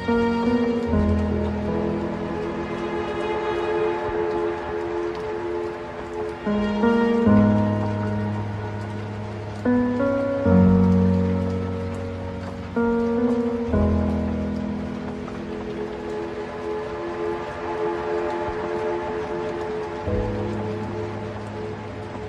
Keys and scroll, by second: 1.4 ctrl+t, 11.4 ctrl+space, 14.0 ctrl+t, 19.4 ctrl+space.